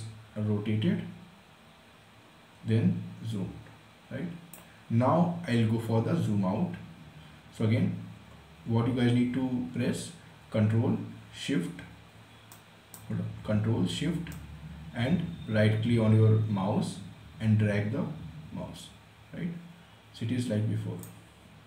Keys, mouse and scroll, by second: 12.1-21.6 right drag.